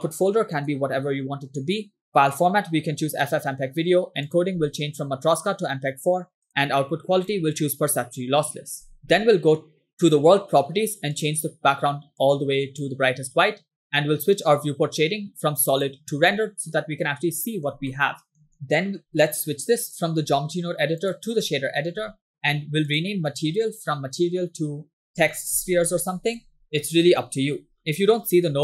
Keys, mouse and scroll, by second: 0.6 /, 2.4-3.4 drag, 3.7 scroll down 2, 4.3 click, 4.5 scroll down 2, 5.3-6.5 drag, 7.2-8.0 drag, 8.7-9.2 scroll up 6, 10.1 click, 11.2 click, 16.1 click, 16.8 middle click, 18.1 shift+middle click, 18.7 middle click, 19.9-21.3 drag, 22.3 scroll down 3, 22.5 scroll up 2, 22.9-26.6 drag, 26.6 BackSpace, 26.6 BackSpace, 27.5 scroll down 2, 28.0-28.3 scroll up 3, 28.4 scroll down 1.